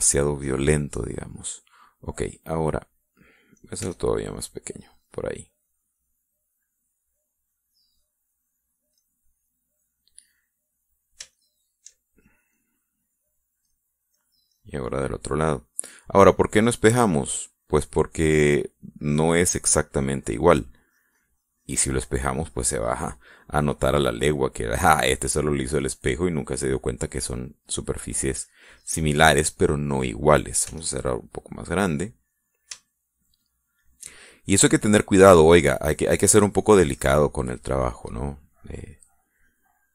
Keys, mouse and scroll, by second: 0.2-3.8 middle drag, 4.8 f, 5.4 click, 6.0 click, 6.5-9.9 drag, 10.0-12.9 middle drag, 13.2-14.6 shift+drag, 14.7-16.3 middle drag, 16.4 middle click, 17.8-20.8 drag, 20.9 middle click, 21.9-24.2 drag, 24.3 middle click, 25.3-26.8 drag, 26.8 middle click, 27.5 click, 28.4 middle click, 29.0 click, 29.8-31.0 middle drag, 31.7 f, 32.5 click, 33.3 middle click, 33.9-35.7 shift+middle drag, 36.5 middle click, 38.0-39.9 drag.